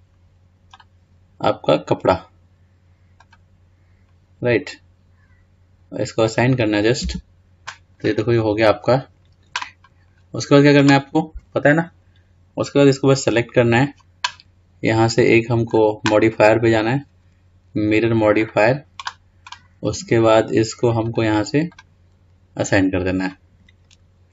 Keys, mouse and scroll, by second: 6.5 click, 7.2 Tab, 8.1 scroll down 2, 8.8-10.4 scroll up 2, 10.4 scroll down 3, 13.4 click, 15.9 click, 17.0-20.0 drag, 21.3 click, 24.0-24.3 scroll down 2.